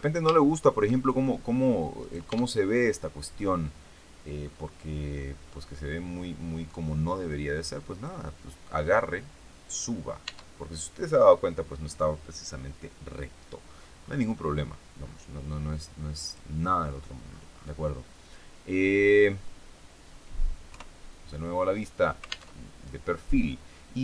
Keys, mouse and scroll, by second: 0.3 shift+middle click, 1.9 right click, 2.2 Tab, 6.7-8.1 drag, 8.1-9.8 middle drag, 9.8-10.1 scroll down 2, 10.2 Tab, 13.6-13.9 scroll down 2, 13.9-14.3 scroll up 2, 14.4-15.2 scroll up 4, 16.2 click, 16.7-17.1 scroll down 2, 17.2 scroll up 2, 17.5 scroll down 2, 20.6 KP_3, 22.4 alt+Tab.